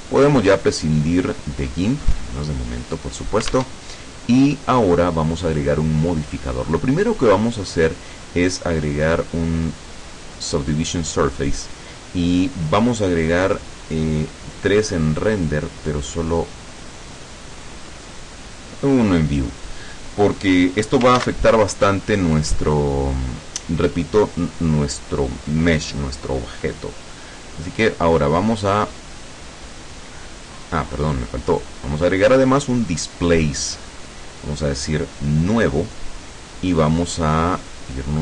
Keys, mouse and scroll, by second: 0.2 click, 1.8 click, 3.7 alt+Tab, 5.7 click, 9.9 click, 15.5 click, 21.3 ctrl+s, 21.5 ctrl+click, 27.7 click, 29.0 click, 30.4 click, 31.5 click, 32.6 click, 34.9 click.